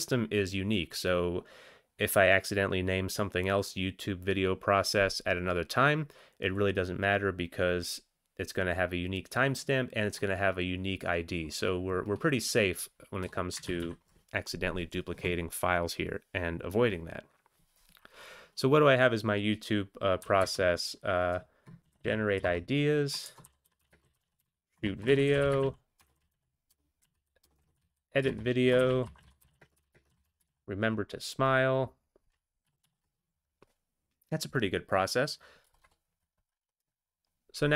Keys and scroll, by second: 13.2 Return, 13.6 Return, 13.8 ctrl+x, 14.0 ctrl+s, 20.2-22.0 typing, 22.4 alt+Return, 23.0-30.9 typing, 24.8 alt+Return, 28.3 Return, 32.7 ctrl+x, 33.0 ctrl+s, 35.7 Return, 36.0 Return.